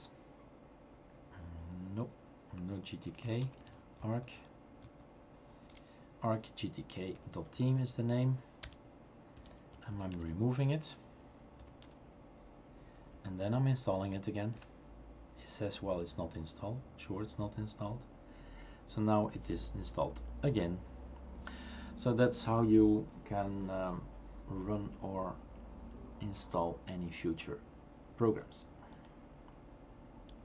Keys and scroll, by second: 3.1-4.4 typing, 4.8 Tab, 7.1-8.0 typing, 8.6 Return, 9.1-10.4 typing, 11.6-12.8 typing, 11.8 Return, 13.2 Up, 13.5 Up, 14.5 Return.